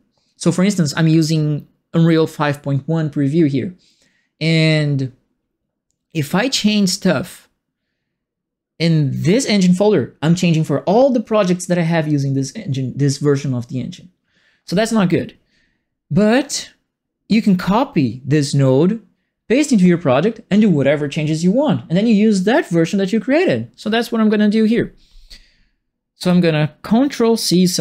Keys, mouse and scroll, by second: 26.2 click.